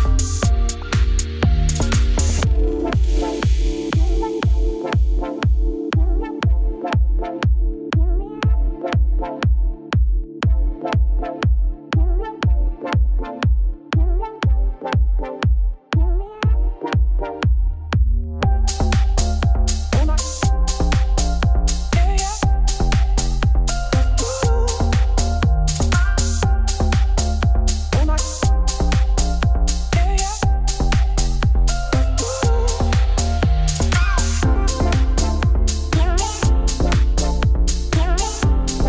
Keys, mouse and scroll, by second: 0.0 shift+middle click, 0.8 Tab, 0.9 click, 1.1 Tab, 1.2 Tab, 1.3 click, 1.8 Tab, 1.9-4.2 typing, 2.3 Tab, 4.0 Tab, 5.3 s, 6.8 click, 7.1-7.6 scroll down 1, 7.6 g, 9.0 middle click, 9.3 e, 10.5-11.7 shift+middle drag, 11.7 2, 11.8 click, 12.0 shift+s, 12.1 Tab, 12.3 shift+a, 13.0 Tab, 13.9 r, 14.5 Tab, 14.6 g, 15.6 middle click, 16.5 Tab, 16.7 middle click, 16.8-17.1 scroll down 1, 17.1 scroll up 3, 17.3 shift+middle click, 17.4 e, 19.7 Tab, 19.8 z, 20.0 scroll down 2, 20.1 shift+middle click, 20.7 scroll up 2, 20.9 shift+middle click, 21.5 scroll down 1, 21.6-22.8 shift+middle drag, 23.5 shift+right click, 24.0-25.0 middle drag, 25.0 shift+a, 27.8 Tab, 28.0 1, 29.0 middle click, 29.3 e, 29.7 ctrl+z, 29.9 f, 31.0 shift+s, 31.2 Tab, 31.9 shift+a, 32.5 Tab, 32.6 middle click, 32.8 s, 34.9 middle click, 35.1 e, 36.9 click, 37.1 click, 37.3 middle click, 37.6 g, 38.8 3.